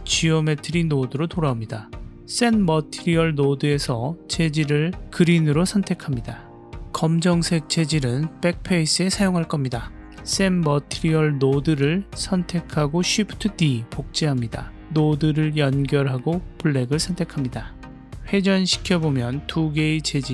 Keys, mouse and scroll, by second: 0.0 click, 2.1 click, 2.8-5.7 drag, 6.4 click, 6.8-7.8 middle drag, 8.2 click, 8.5-8.9 middle drag, 9.2 click, 9.8 click, 10.5 click, 12.0 shift+d, 15.3 click, 16.2-16.9 drag, 17.4-19.1 middle drag, 19.8-20.2 middle drag.